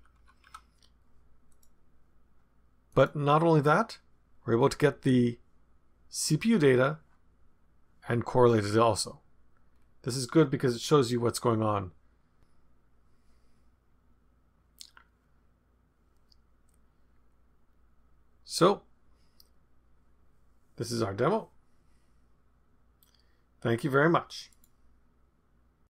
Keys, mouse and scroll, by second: 0.2 Down, 0.4 Down, 1.5 click, 2.9 click, 8.8-9.6 scroll down 2, 9.6-10.2 scroll down 1, 10.2 scroll down 1.